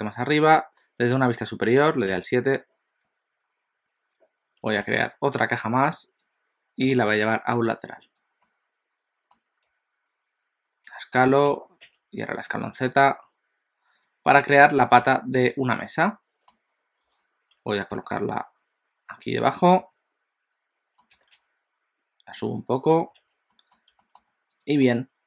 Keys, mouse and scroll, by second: 2.1 KP_7, 4.8 shift+a, 6.9 g, 8.5 middle click, 9.7 s, 11.6 s, 14.4 middle click, 15.2 shift+middle click, 15.6 middle click, 17.1 KP_7, 17.9 g, 19.7 middle click, 21.2 g, 23.2 alt+a, 23.5 middle click, 24.0 shift+middle click, 24.7 click, 24.9 middle click.